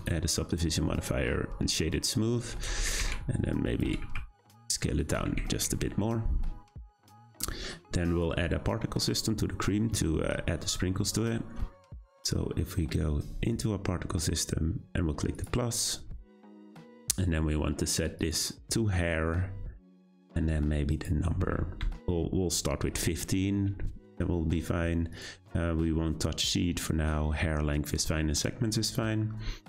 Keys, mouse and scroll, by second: 0.0-1.2 right drag, 1.2-2.5 scroll down 4, 2.5 Tab, 2.9 a, 2.9 s, 3.8 s, 5.2 Tab, 5.4-5.8 shift+middle drag, 5.8 `, 6.9-8.0 shift+middle drag, 8.0-9.1 scroll up 1, 9.1 click, 13.5 click, 15.3-18.3 drag, 20.9-24.0 drag, 29.0-29.6 scroll down 3.